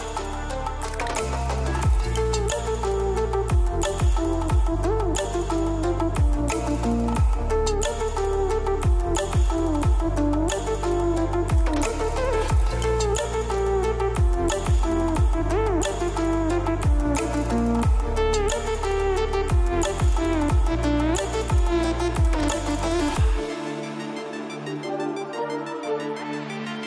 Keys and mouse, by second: 2.0 click, 2.7-3.1 middle drag, 3.6 click, 4.9 KP_0, 5.7 middle click, 6.6 click, 7.6 KP_0, 9.2 s, 9.4 x, 13.8-15.6 drag, 18.1 click, 18.9 click, 19.3 middle click, 20.6 middle click, 21.8-22.8 drag, 23.7-24.5 middle drag, 24.9 shift+middle drag, 25.6-26.0 shift+middle drag, 26.4-26.8 shift+middle drag.